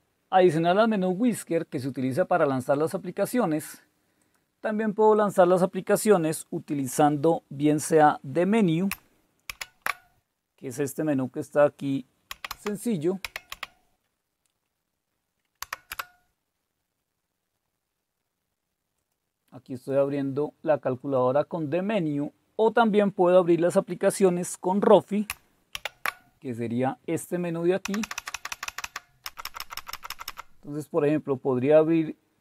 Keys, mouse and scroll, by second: 2.8 click, 9.5 alt+super+d, 12.1-13.5 typing, 15.6 Right, 15.9 Return, 19.0 click, 19.7 click, 25.8 alt+super+r, 27.8 Down, 28.0 Down, 28.2 Down, 28.3 Down, 29.3 Up, 29.4 Up, 29.6 Up, 29.7 Up.